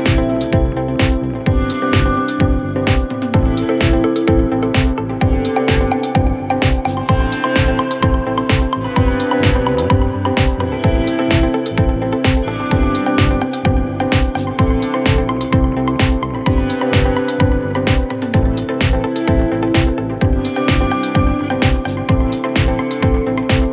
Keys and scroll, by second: 5.7 c, 12.5 F9, 15.3 shift+F2, 15.5 Escape, 16.9 F9.